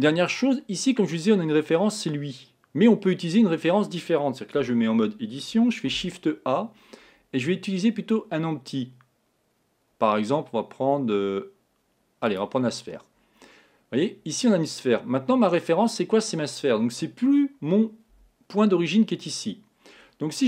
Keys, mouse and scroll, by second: 15.5-17.3 scroll down 2, 17.3-18.7 scroll down 1.